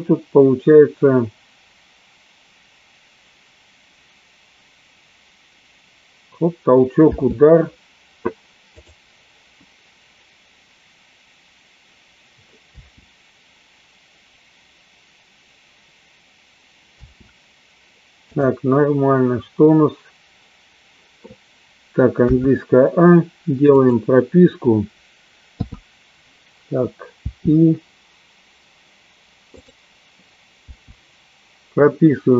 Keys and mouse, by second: 7.8 space, 9.3 click, 12.8 space, 17.6 space, 24.3 click, 24.3 a, 27.7 i, 30.2 click.